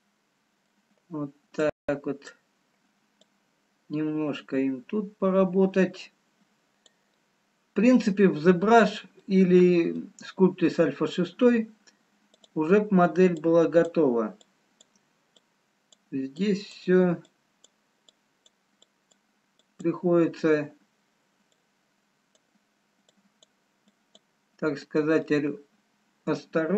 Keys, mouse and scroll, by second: 0.3 middle click, 2.2 click, 3.5 click, 7.3 middle click, 8.3 scroll down 1, 9.2 middle click, 12.5 click, 13.6-21.6 click.